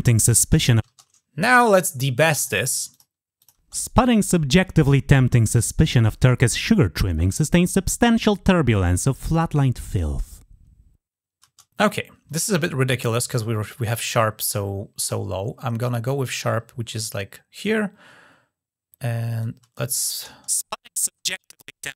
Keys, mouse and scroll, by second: 2.2 click, 2.7 click, 3.2 click, 8.9 click, 13.2-17.5 drag, 19.2 click, 19.9 click.